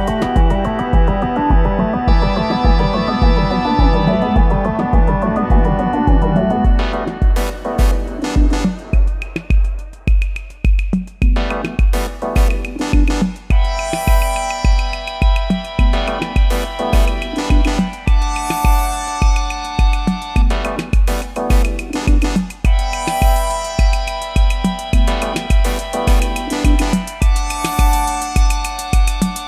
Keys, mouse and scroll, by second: 6.6 alt+click, 8.1 alt+click, 10.4 alt+click, 12.2 alt+click, 17.2 alt+click, 19.6 alt+click, 25.3 alt+BackSpace.